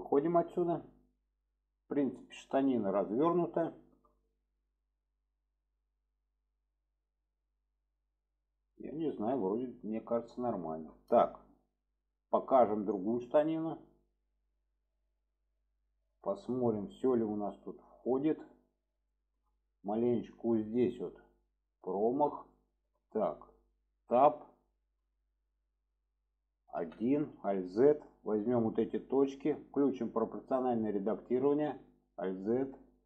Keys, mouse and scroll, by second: 0.5-2.8 middle drag, 3.7 shift+middle drag, 4.6-5.1 middle drag, 5.7-8.3 middle drag, 8.8-9.6 alt+middle drag, 10.6 shift+middle drag, 12.8 click, 13.4 shift+middle drag, 14.5-15.0 middle drag, 15.2 middle click, 16.0-16.6 shift+middle drag, 17.2-17.8 middle drag, 18.1 shift+middle drag, 19.1-19.4 shift+middle drag, 20.0-20.4 middle drag, 22.0 shift+middle click, 22.6 alt+middle click, 25.0 Tab, 26.8 1, 28.1-28.8 drag, 30.4 click.